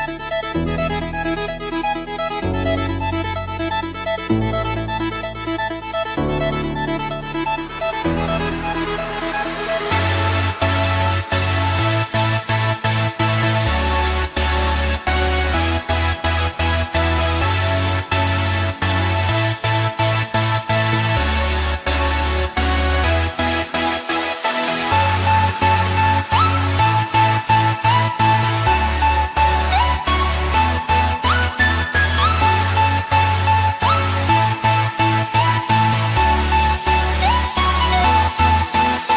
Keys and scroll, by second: 16.8 alt+BackSpace.